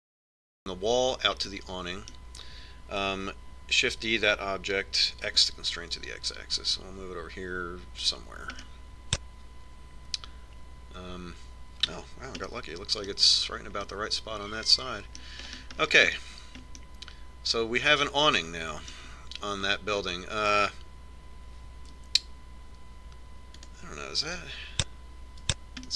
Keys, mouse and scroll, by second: 2.5-4.5 middle drag, 4.9 shift+d, 9.7 middle click, 10.2-11.4 middle drag, 13.6-19.8 middle drag, 21.0-23.0 middle drag, 24.8-25.9 drag.